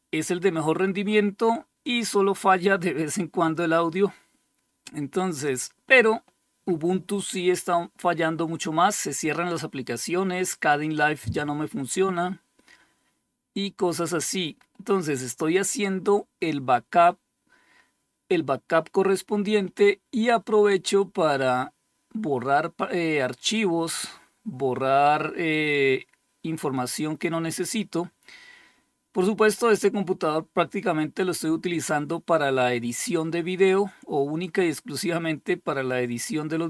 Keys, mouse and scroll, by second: 22.8 click, 28.6-36.6 scroll up 2.